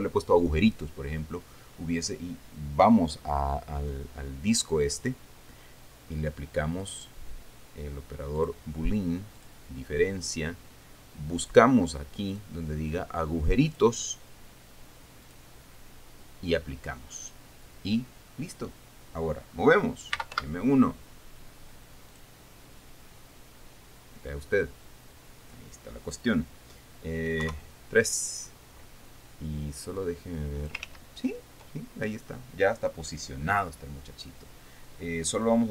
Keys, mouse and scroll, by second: 5.4 right click, 7.4 click, 8.9 click, 9.9 click, 12.0 click, 12.9 click, 14.3 click, 15.8 click, 20.4-21.4 typing, 22.7 click, 23.5-24.1 scroll down 2, 24.5 scroll up 2, 25.1-25.4 scroll down 2, 28.0 KP_3, 29.0 scroll up 2, 30.5 click, 31.3 ctrl+z.